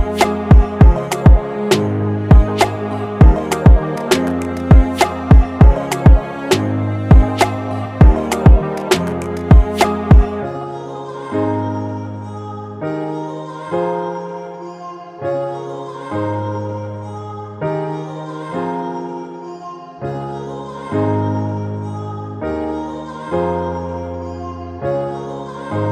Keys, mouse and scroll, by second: 3.6 double click, 13.5-16.0 scroll up 1, 19.8-20.9 typing, 22.7 ctrl+t, 24.2 Return, 25.8 Return.